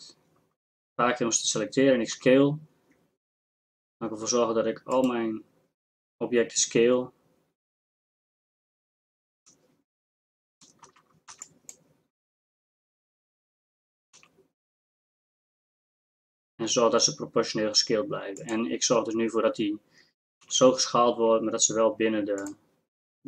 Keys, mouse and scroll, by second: 2.1 s, 10.9 a, 11.3 b, 14.2 s, 20.4 g.